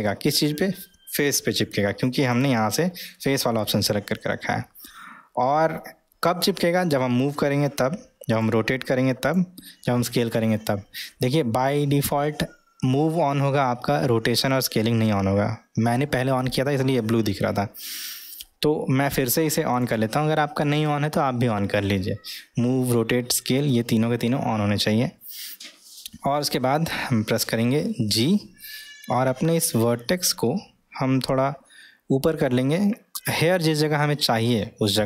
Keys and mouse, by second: 2.4-24.5 drag, 28.1 g.